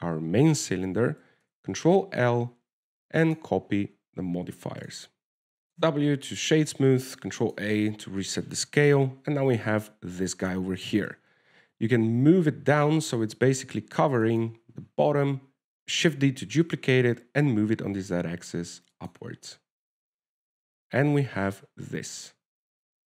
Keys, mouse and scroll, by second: 2.7 ctrl+l, 5.2-5.7 scroll up 2, 5.7 click, 5.7 middle click, 5.7-6.3 scroll down 2, 6.3 middle click, 6.5-7.1 scroll up 1, 7.1 scroll up 2, 7.1 w, 8.2 ctrl+a, 9.1 scroll down 2, 10.3 KP_0, 12.2 g, 15.8 shift+d, 17.8 g, 21.1 alt+a.